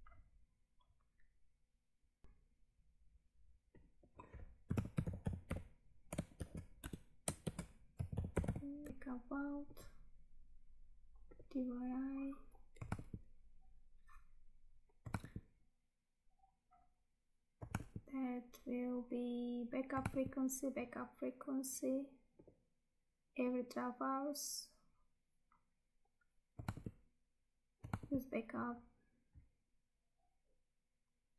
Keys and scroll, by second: 2.2 Tab, 8.9 Tab, 13.0 Tab, 15.2 Tab, 17.8 Tab, 20.1 Tab, 26.8 Tab, 28.1 Tab.